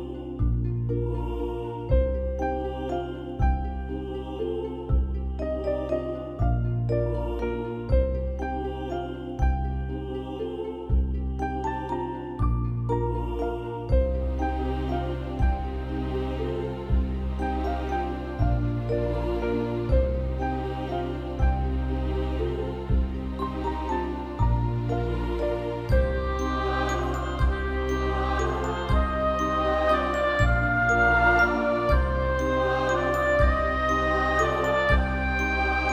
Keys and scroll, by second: 3.3 alt+BackSpace, 3.9 ctrl+BackSpace, 5.1 ctrl+=, 5.2 ctrl+=, 5.5 space, 9.2 ], 14.4 ctrl+0, 23.4 ctrl+z, 23.5 ctrl+z.